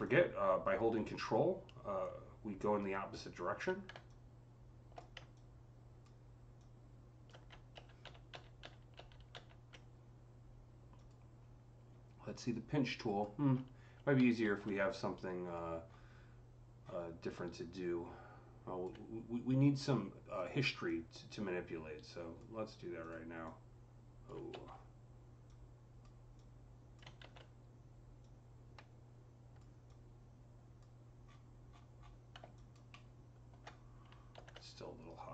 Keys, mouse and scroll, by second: 7.6 ctrl+z, 7.9 ctrl+z, 8.2 ctrl+z, 10.8 click, 12.4-15.4 drag, 14.3 z, 15.2-15.7 scroll up 2, 15.7-16.1 scroll down 5, 16.6-17.1 scroll up 5, 17.5-20.7 alt+drag, 20.7-22.9 alt+drag, 22.9 click, 23.3-31.1 drag, 24.4 ctrl+z, 27.1 z, 31.1 scroll, 31.2-31.5 scroll down 1, 31.6-31.9 scroll down 7, 32.4 alt+click, 32.8-35.3 alt+middle drag, 34.2 ctrl+z.